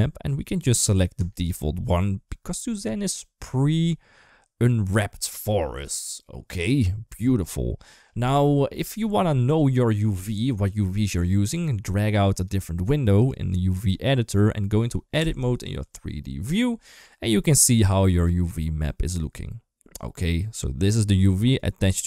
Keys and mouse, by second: 10.1 click, 12.3 click, 15.8 Tab, 17.6 shift+middle click.